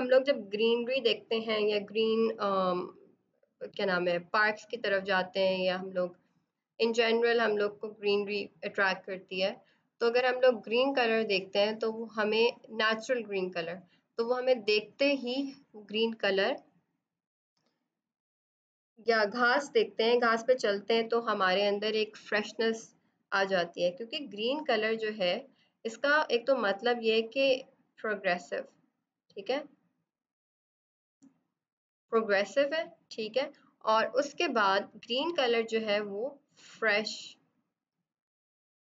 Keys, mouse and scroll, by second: 0.2 click, 24.5 click, 25.7 right click, 26.5 click, 35.8 click.